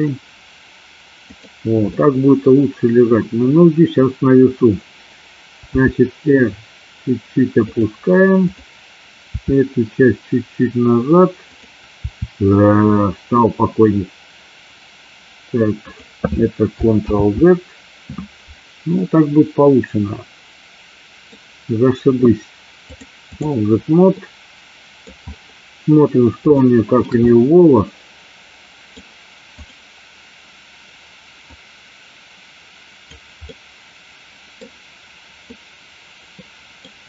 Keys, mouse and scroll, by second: 1.4 click, 2.0 middle click, 5.8 r, 7.7 click, 8.6 click, 9.4 r, 11.5 click, 12.1 r, 15.9 click, 17.3 ctrl+z, 19.1-21.3 middle drag, 23.0 click, 24.2 middle click, 26.7 shift+middle click, 27.3-29.1 middle drag, 29.6 click, 31.6-33.2 drag, 33.5-34.7 middle drag, 35.7-36.9 middle drag, 36.9 scroll down 1.